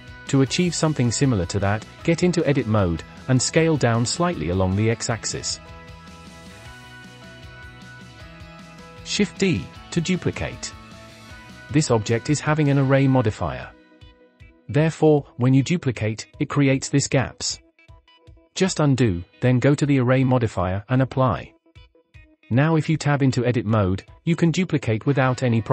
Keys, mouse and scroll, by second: 1.1 Tab, 2.6 KP_7, 3.0-4.4 scroll up 12, 4.5 a, 4.9 s, 7.7 scroll down 2, 8.3 shift+middle click, 9.7 shift+d, 18.1 ctrl+z, 19.4 Tab, 19.7 shift+middle click, 20.7-21.1 drag, 22.0-22.4 scroll up 2, 22.4 Tab, 23.1-23.6 scroll up 6, 23.9 shift+middle click, 24.2 shift+d.